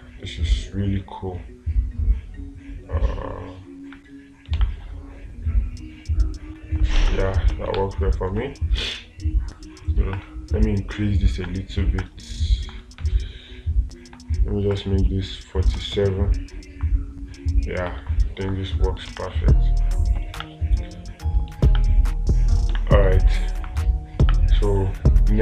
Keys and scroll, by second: 5.0 space, 7.4 space, 8.2 space, 19.5 space, 22.1 space.